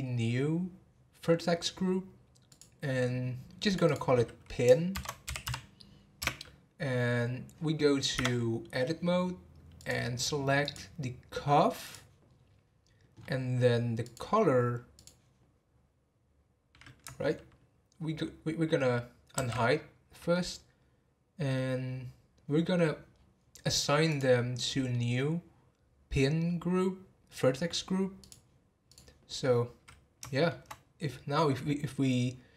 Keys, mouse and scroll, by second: 1.2-1.6 scroll up 6, 2.5-3.7 drag, 3.8-6.8 drag, 8.2 Tab, 9.7 click, 11.8 click, 12.3-13.1 scroll down 3, 13.1 scroll up 3, 14.0 click, 14.9-18.1 drag, 20.3-23.1 middle drag, 23.1 scroll down 2, 24.1 click, 24.5-27.5 middle drag, 28.2 click, 29.5-30.3 scroll down 2, 30.3-32.5 shift+middle drag.